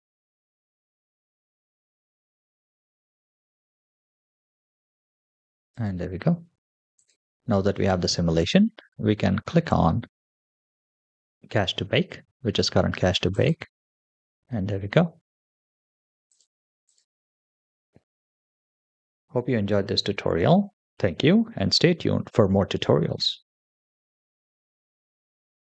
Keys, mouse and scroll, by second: 8.5 click, 9.6 click, 11.3 scroll up 1, 13.7 click, 16.3 click, 25.6 click.